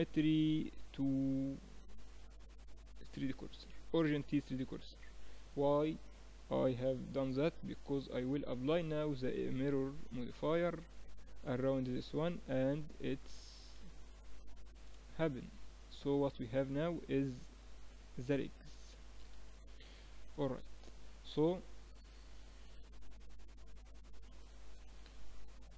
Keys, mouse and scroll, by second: 4.7-7.1 middle drag, 5.8 KP_Decimal, 7.1 KP_1, 8.3 click, 12.3-20.5 middle drag, 23.2-25.7 drag, 24.4 KP_1.